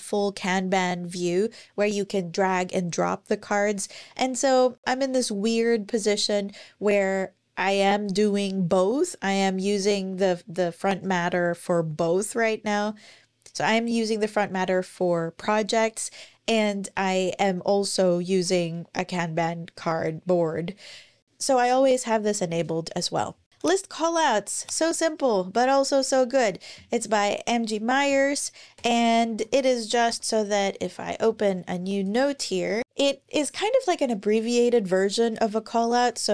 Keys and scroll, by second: 28.6 ⟲, 29.9 super+n, 32.5 Return, 32.6 Return, 32.8 Up, 35.8-36.3 typing.